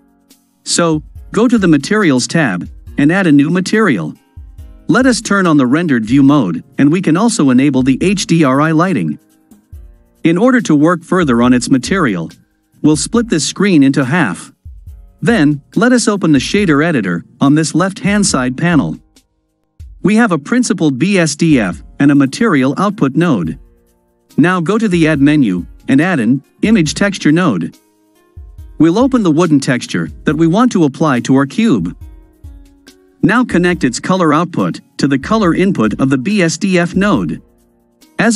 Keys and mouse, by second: 1.6 click, 5.5 click, 6.7-8.8 drag, 13.0 click, 15.6-16.7 drag, 18.3-19.3 drag, 22.2-23.6 drag, 24.8-27.9 drag, 28.9 click, 34.2-36.7 drag.